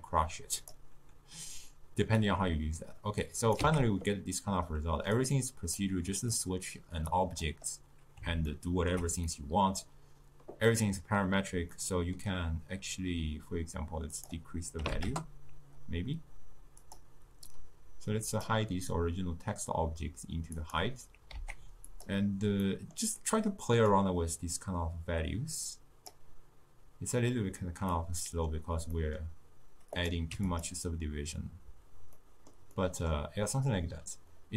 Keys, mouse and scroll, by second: 3.5 click, 3.7 x, 5.3-6.5 drag, 6.5-7.3 middle drag, 7.3 click, 8.6-14.3 ctrl+middle drag, 14.3-17.1 drag, 17.6 drag, 20.7 click, 21.5 z, 22.8-24.1 middle drag, 24.1-27.1 drag, 28.1-30.1 middle drag, 30.1 click, 32.3-34.5 middle drag.